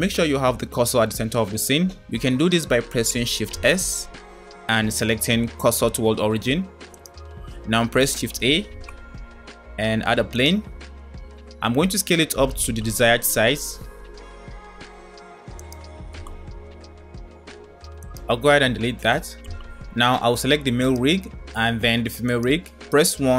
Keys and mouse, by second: 3.7 shift+s, 8.5 shift+a, 12.1 s, 15.9 s, 19.3 Delete.